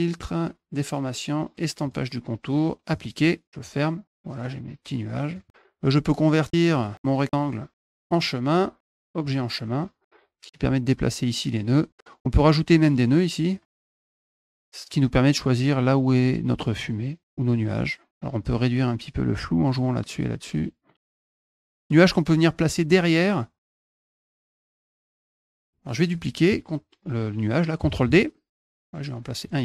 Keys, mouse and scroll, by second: 1.6 click, 2.7 click, 4.0 click, 4.7 click, 6.5 click, 7.6 click, 7.9 click, 9.0 click, 10.4 click, 12.5 click, 12.7 click, 13.3 click, 13.9 click, 14.4 click, 16.6 click, 16.8 click, 17.2 click, 18.2-19.5 drag, 20.4 click, 21.6 click, 23.7 click, 24.9 click, 25.3 ctrl+z, 25.5 click, 27.8 d, 28.3 click.